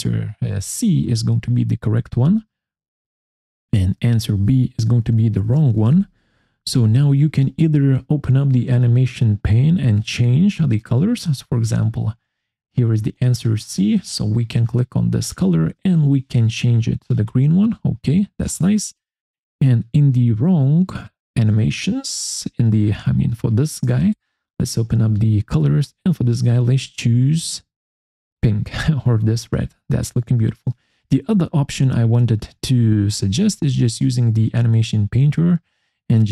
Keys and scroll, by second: 0.7-2.1 typing, 4.1-6.0 typing.